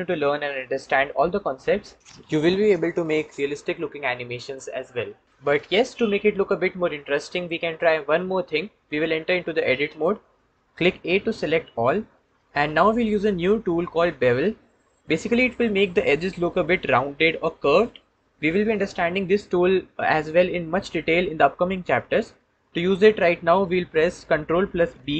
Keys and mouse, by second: 9.7 Tab, 11.7 a.